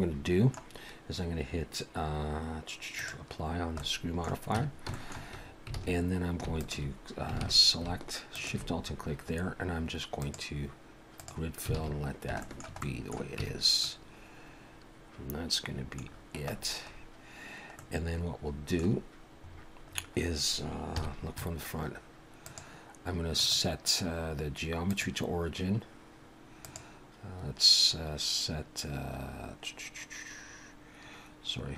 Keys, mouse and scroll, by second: 3.0 click, 3.8 middle click, 4.6 Tab, 4.9 shift+middle click, 5.4-5.8 scroll up 2, 5.8 alt+a, 6.5 alt+shift+click, 7.4 alt+a, 8.3 alt+shift+click, 8.8-10.2 scroll up 3, 10.2 click, 11.7 alt+a, 12.0-12.3 scroll down 4, 12.4 shift+middle click, 12.8 middle click, 13.4 Tab, 13.8 middle click, 16.0-17.6 scroll down 11, 17.8 middle click, 19.5 scroll up 2, 19.8 scroll down 1, 19.9 scroll down 2, 20.8 scroll down 1, 20.9 KP_1, 22.4 click, 26.6 click.